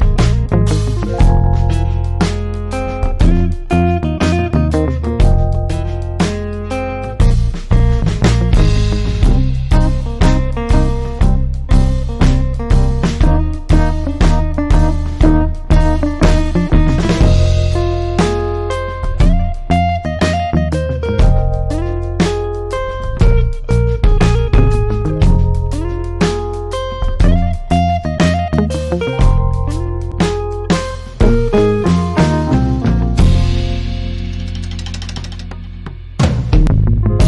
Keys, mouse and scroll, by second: 8.4-11.2 drag, 11.2-11.9 typing, 18.7 ctrl+space, 18.9 ctrl+click, 19.1-19.9 ctrl+space, 20.0 click, 20.1 space, 20.7 click, 20.8 space, 21.1 click, 21.2-21.6 space, 22.6 click, 22.8 space, 22.9 click, 23.1-24.2 space, 24.6 click, 25.0 space, 26.8 alt+click, 27.4 space, 27.6 click, 27.8-28.5 space, 29.3 click, 36.4-37.1 typing.